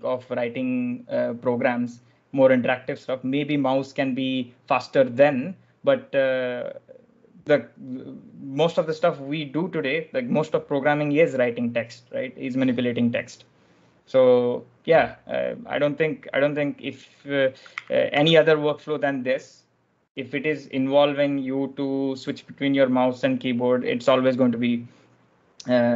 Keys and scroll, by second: 17.6 w, 18.0 w.